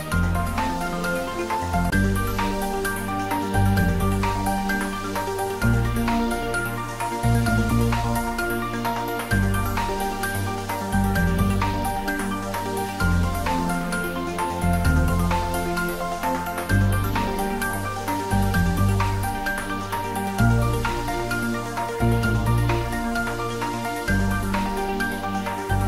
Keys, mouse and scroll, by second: 0.2-0.8 middle click, 0.8 scroll up 1, 3.2-5.7 drag, 6.1-7.5 scroll down 1, 11.8 click, 12.7 Tab, 13.0 click, 13.6-14.1 scroll up 1, 16.7 click, 19.9 alt+shift+click.